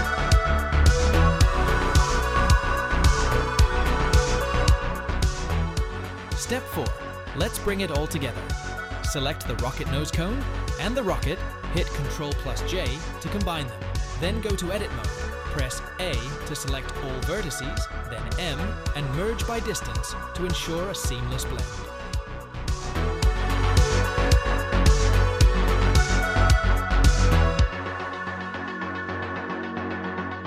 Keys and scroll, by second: 1.5 2, 3.1 ctrl+b, 6.5 Tab, 12.3 ctrl+j, 13.5 Tab, 15.6 a, 18.9 m, 22.1 1, 23.7 g, 24.5 2, 25.5 g, 28.0 Tab, 29.1 2.